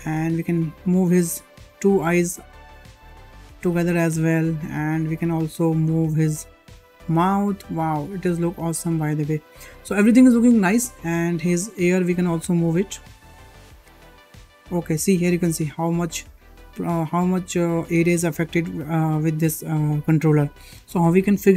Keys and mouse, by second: 0.3 click, 0.9 shift+middle drag, 1.4 g, 5.2-5.6 shift+middle drag, 6.0 click, 6.7 g, 11.2 shift+middle click, 12.1 click, 12.6 drag, 12.8 middle click, 13.8 r, 20.4 shift+middle drag.